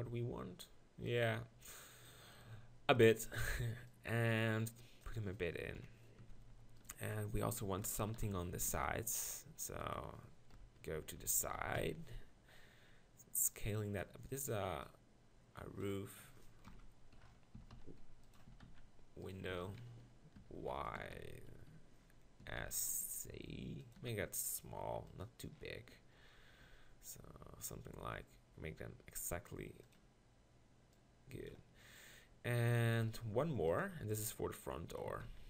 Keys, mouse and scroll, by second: 1.3 shift+d, 2.5 Tab, 3.9-5.7 drag, 5.7 KP_7, 6.2 Tab, 6.4 z, 8.1 ctrl+l, 8.7 shift+d, 10.5 KP_1, 10.9-11.8 KP_4, 15.3-16.6 drag, 16.6 ctrl+KP_Decimal, 17.6 s, 18.3-19.9 drag, 18.5 s, 19.5 right click, 19.5 s, 21.0 d, 21.2 x, 22.4 s, 24.0-25.1 drag, 24.0 g, 25.5 click, 26.6 g, 26.7-28.2 drag, 30.9-33.0 drag, 33.0 shift+d, 33.7 middle click, 34.2 click, 35.0 s, 35.2 middle click.